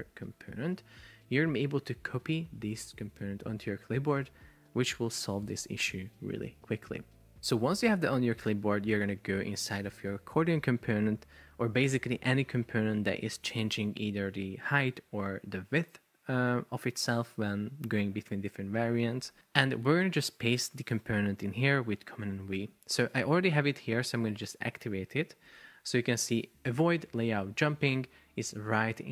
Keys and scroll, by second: 25.7 super+é.